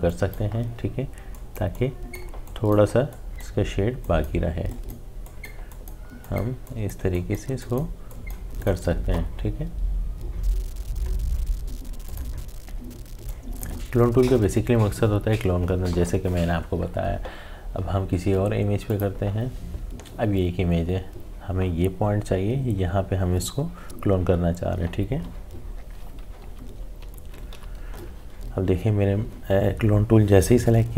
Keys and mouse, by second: 12.0-16.1 drag, 18.9 click, 26.4-27.3 typing, 29.5 typing.